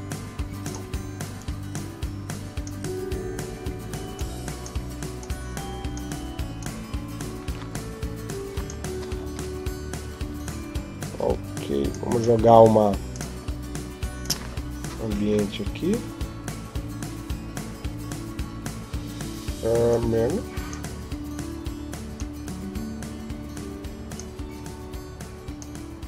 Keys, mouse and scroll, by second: 4.0 click, 5.0 click.